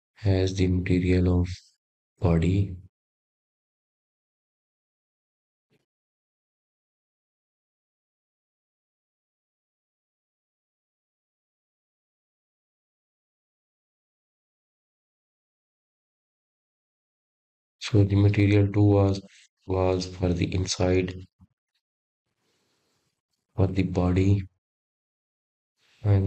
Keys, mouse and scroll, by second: 0.7 Tab, 1.5 click, 2.3 click, 3.0 click, 3.7 click, 5.5 click, 8.6 click, 9.6-11.2 middle drag, 11.2-11.7 scroll up 1, 13.6 click, 14.2-15.9 drag, 16.7 click.